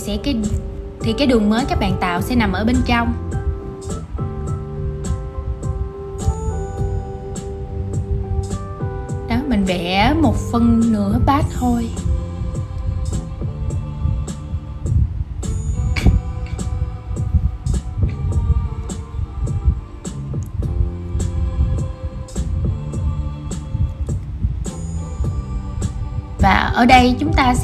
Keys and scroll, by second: 8.9 super+z, 25.3 super+c, 26.3 shift+super+v.